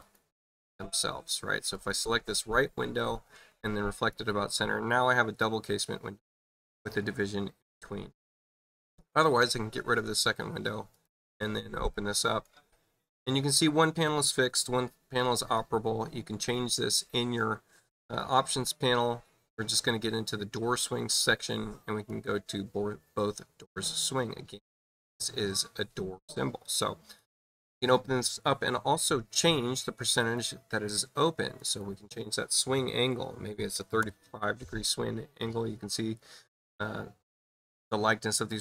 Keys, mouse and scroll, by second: 1.0 click, 1.7 click, 3.8 click, 9.0 click, 10.9 click, 11.9 click, 15.1 click, 15.3 click, 18.1 click, 22.0 click, 23.9 click, 27.1 click, 27.3 click, 30.1 click, 31.5 click.